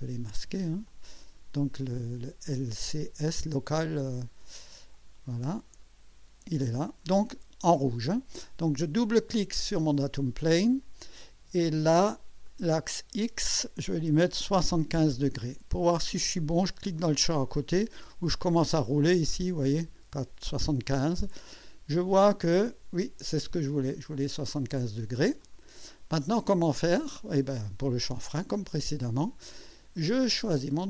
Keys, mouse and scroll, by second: 0.9-1.6 drag, 4.9-7.1 drag, 9.5 click, 12.4 click, 14.5 KP_7, 14.8 5, 18.6 scroll down 2, 19.8 scroll up 2, 21.5-24.1 drag, 25.4 click, 26.2-28.3 drag, 28.5 click, 30.7 click.